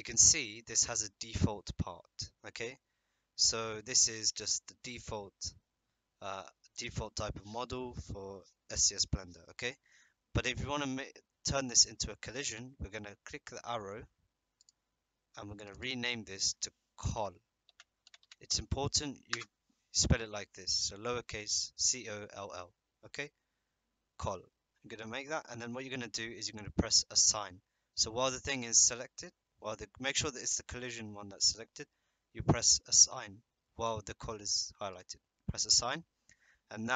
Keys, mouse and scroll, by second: 15.6 click, 15.7-20.3 drag.